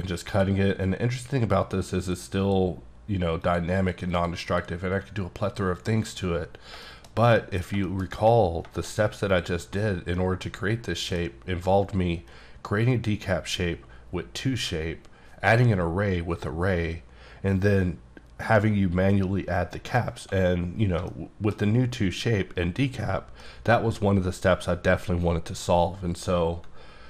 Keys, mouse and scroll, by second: 0.3 click, 2.0 double click, 2.4 click, 3.4 click, 4.1 click, 4.4 click, 5.8 double click, 6.0 click, 6.5 scroll down 2, 6.8 shift+middle click, 7.1 shift+scroll down 2, 7.4 middle click, 8.1-8.6 scroll up 2, 8.6 scroll down 1, 8.8 middle click, 9.3 click, 10.2 middle click, 10.9 middle click, 11.4 scroll up 1, 21.1 shift+middle click.